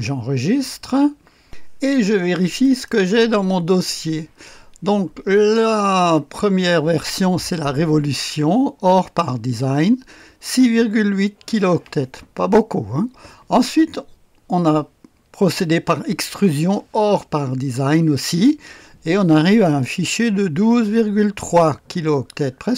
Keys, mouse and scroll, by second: 1.4 click, 2.6 click, 2.9 click.